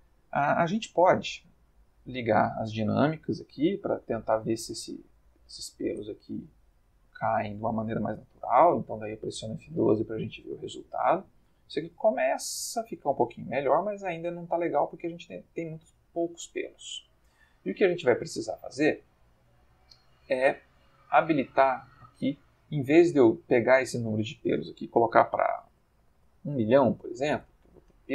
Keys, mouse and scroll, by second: 2.2 click, 3.0 space, 5.9 space, 8.6 F12, 12.6-13.8 ctrl+middle drag, 16.6 click, 21.2 click, 23.9 click, 25.4 1, 25.6 0, 27.0 0, 27.3 Return.